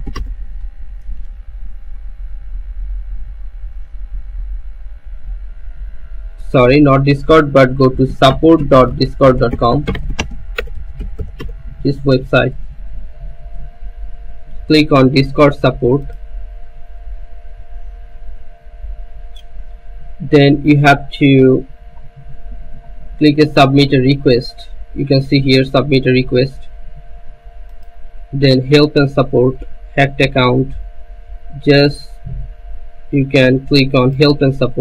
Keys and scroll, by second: 0.0-0.5 typing, 7.8-12.4 typing, 12.9 Return.